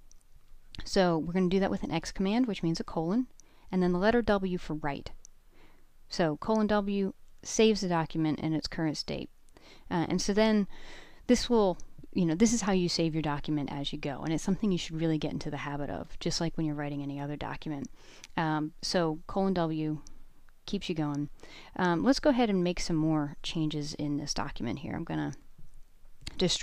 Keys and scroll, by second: 1.5-3.0 typing, 6.2 Return, 22.7 j, 22.8 j, 24.4-25.9 typing.